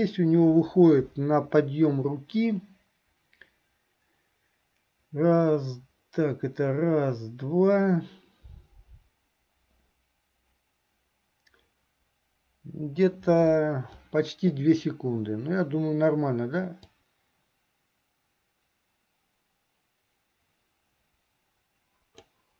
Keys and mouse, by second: 17.1-22.5 drag.